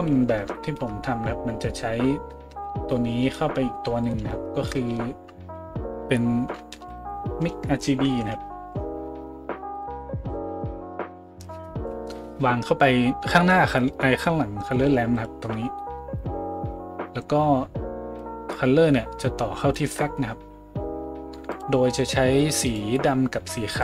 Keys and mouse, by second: 4.0 right click, 4.9 a, 6.8 shift+a, 15.3-18.3 middle drag, 18.3-21.6 drag, 21.6-22.6 middle drag, 22.6 click, 22.7-23.8 middle drag.